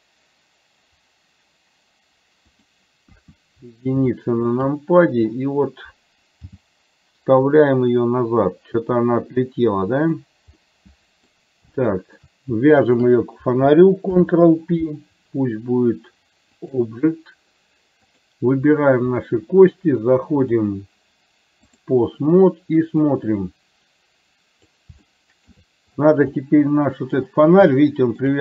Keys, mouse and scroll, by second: 3.3 KP_1, 4.3 shift+middle click, 6.7 g, 10.7 middle click, 11.9 shift+middle click, 14.2 ctrl+p, 18.2 click, 20.7-22.0 drag, 23.3-24.9 drag, 25.2 shift+middle click, 26.4 middle click, 27.9 shift+middle click.